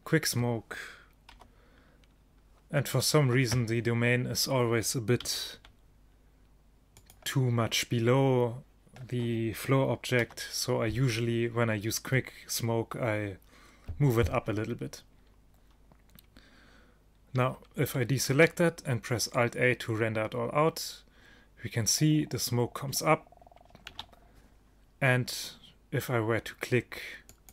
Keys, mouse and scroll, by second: 1.4 KP_1, 5.3 g, 10.3 KP_0, 17.5 a, 18.4 alt+a, 23.9 alt+a, 27.4 click.